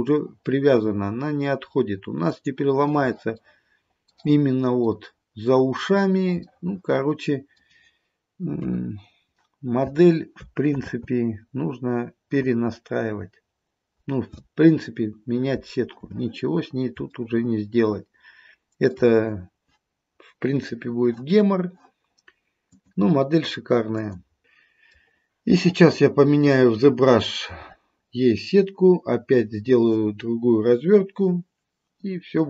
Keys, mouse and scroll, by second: 3.4 middle click, 3.5 middle click, 4.5-6.0 scroll up 2, 5.0 middle click, 6.0-6.6 scroll down 2, 6.6 middle click, 8.6 KP_3, 10.8 ctrl+z, 17.2 shift+middle click, 18.8 shift+middle click, 23.1-24.4 click, 23.9 click, 24.4 middle click, 26.5 middle click.